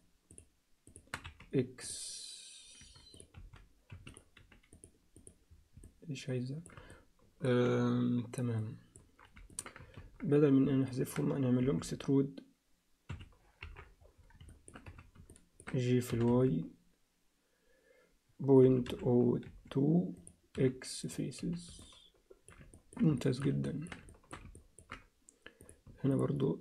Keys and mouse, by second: 1.2 x, 3.1 click, 3.3 x, 4.2 click, 5.2 click, 5.8 alt+middle click, 6.9 ctrl+alt+middle click, 8.6 ctrl+alt+middle click, 9.5 ctrl+middle click, 10.0 ctrl+z, 10.9 ctrl+middle click, 11.6 e, 13.6 KP_7, 14.5 alt+shift+middle click, 14.8 z, 15.3 ctrl+alt+middle click, 16.1 g, 20.6 x, 21.4 z, 21.8 alt+middle click, 22.7 ctrl+alt+middle click, 23.2 alt+shift+middle click, 23.6 ctrl+alt+middle click, 24.1 alt+shift+middle click, 24.6 ctrl+alt+middle click, 25.6 click, 26.1 shift+click.